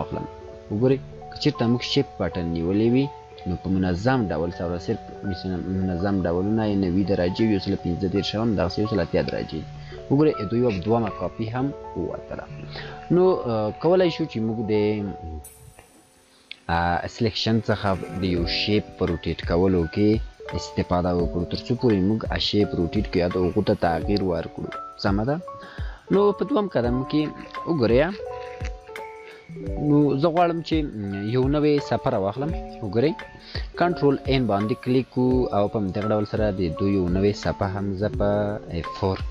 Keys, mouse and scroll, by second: 11.2 scroll up 2, 11.7 scroll down 1, 14.5 scroll up 1, 19.5 click, 29.1 scroll up 1, 36.3 click.